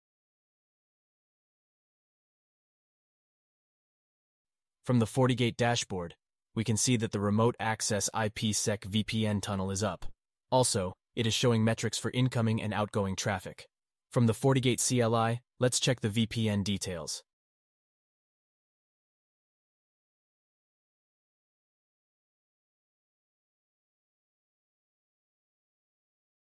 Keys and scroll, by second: 3.7 alt+q.